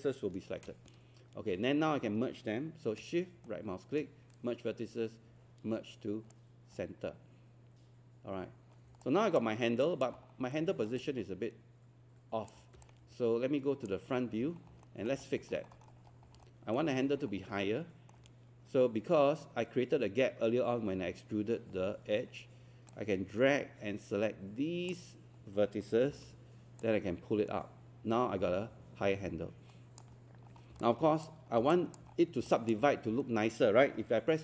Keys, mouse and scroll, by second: 3.4-6.7 shift+right drag, 8.3-8.6 scroll down 1, 9.0 alt+click, 10.2 scroll down 1, 10.5 alt+middle click, 11.0 alt+click, 12.8 click, 14.5 scroll down 1, 14.6 scroll up 1, 14.8 alt+middle click, 15.2 scroll up 1, 16.4 alt+middle click, 16.9 scroll up 1, 17.6 alt+middle click, 22.9-25.7 drag, 26.1 w, 26.8-30.7 drag, 31.5 scroll down 1, 31.7 alt+click, 32.1 scroll up 1, 32.5 alt+click, 32.9 scroll up 1, 33.2 alt+middle click.